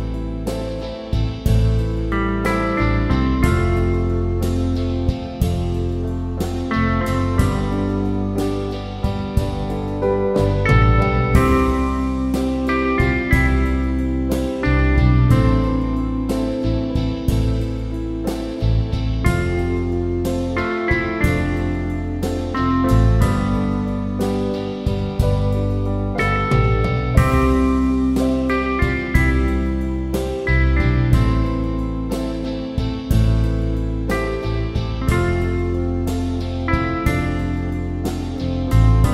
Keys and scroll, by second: 7.5 alt+shift+Return, 8.3 Up, 8.5 Up, 8.7 Up, 14.7-18.8 typing, 25.9 Down, 29.3 Up, 29.7 Up, 29.9 Up, 32.8 Up, 33.1 Up, 33.4 Up, 33.7 Up, 33.9 Up, 34.6 Up, 35.3 Down.